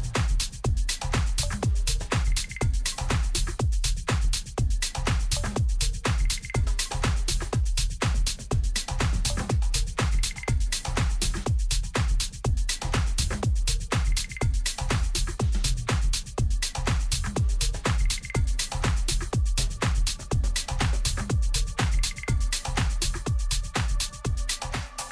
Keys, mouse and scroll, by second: 2.9 ctrl+r, 7.0 a, 13.8 b, 17.0 g, 22.1 g.